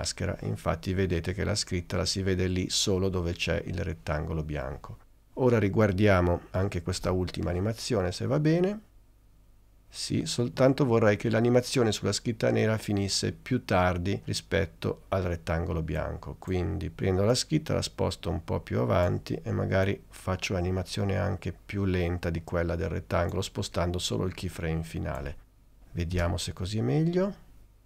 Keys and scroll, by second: 7.1 space, 26.3 space.